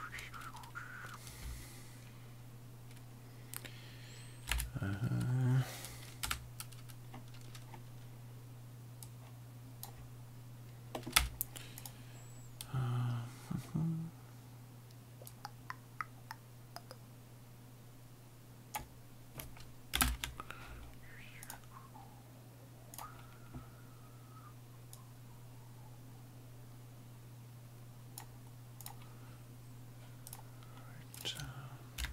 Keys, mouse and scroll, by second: 4.5 ctrl+v, 6.2 Tab, 9.2 click, 11.1 middle click, 11.9 click, 15.4 click, 20.0 ctrl+i, 21.5 click, 23.0 click, 25.1 click, 28.9 click, 30.3 click.